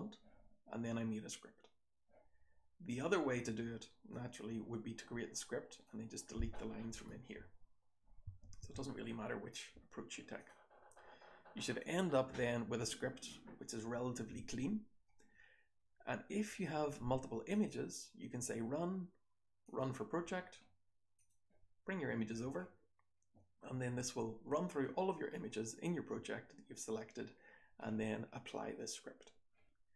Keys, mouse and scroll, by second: 4.1 click.